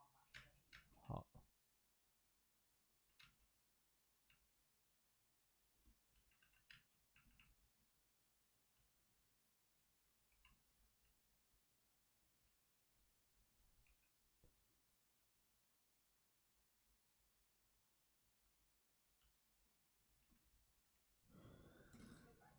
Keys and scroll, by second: 6.4 alt+s, 6.6 space, 10.2 3, 13.8 5.